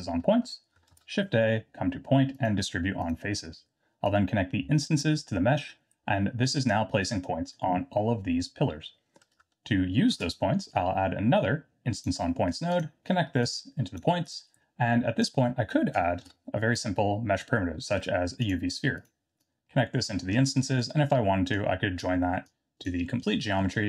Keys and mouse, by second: 0.9 shift+a, 4.0-5.0 drag, 5.5 middle click, 10.1 shift+a, 13.6 click, 14.3-15.3 drag, 16.2 shift+a, 19.4-20.0 drag, 20.6 middle click, 21.7 click, 22.4 click, 23.7 middle click.